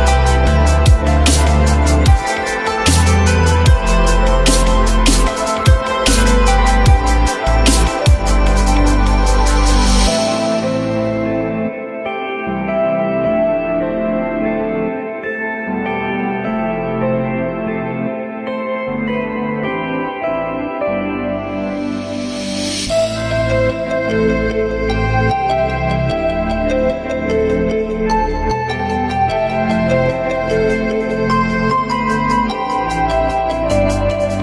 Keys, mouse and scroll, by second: 5.4 alt+middle click, 6.9 alt+middle click, 7.4-8.0 alt+scroll up 1, 8.0 ctrl+click, 8.5 shift+click, 9.2 alt+middle click, 10.3 ctrl+click, 10.8 shift+click, 10.9 shift+double click, 11.5 ctrl+z, 11.9 shift+click, 12.1 shift+double click, 13.8 j, 26.1 Delete, 27.9 alt+middle click, 28.8 alt+middle click, 29.1 ctrl+z, 31.4 ctrl+z.